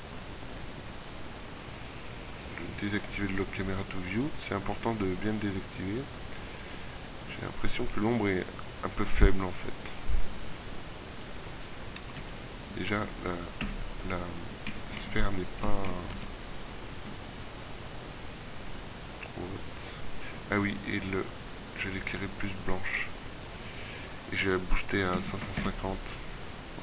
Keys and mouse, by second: 0.0-2.6 middle drag, 12.1 KP_3, 13.0 z, 13.2 KP_1, 14.3 middle click, 16.2 z, 16.6 middle click, 25.0 KP_5.